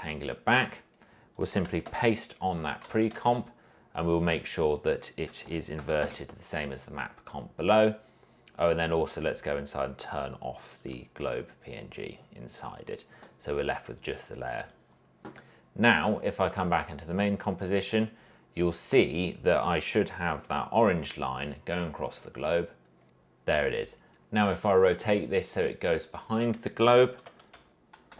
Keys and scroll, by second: 2.0 ctrl+v, 3.5 s, 5.7 Left, 6.2 Return, 19.3 v, 26.8-28.1 typing.